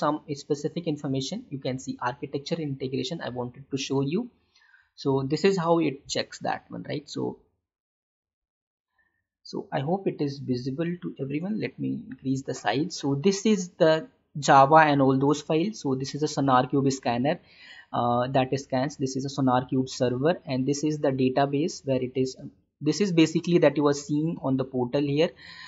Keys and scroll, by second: 10.6 ctrl+=.